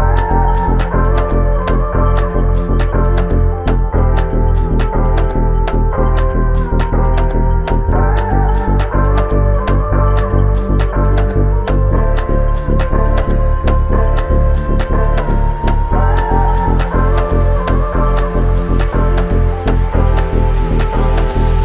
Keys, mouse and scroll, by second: 4.4 alt+click, 13.0 alt+click.